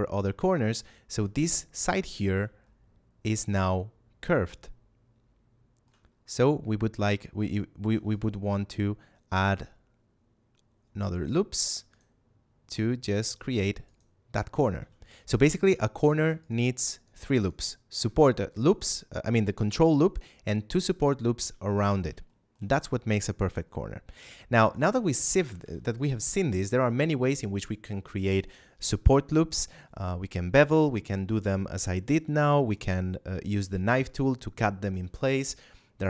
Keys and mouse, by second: 0.3 shift+middle click, 2.5 shift+middle click, 7.7 ctrl+r, 8.0 click, 11.4 ctrl+r, 11.8 click, 14.7 a, 16.3 alt+right click, 16.9 alt+shift+right click, 17.3 alt+shift+right click, 21.4 a, 22.2 shift+middle click, 24.1 Tab, 24.7 right click, 25.1 shift+right click, 25.5 x, 25.9 click.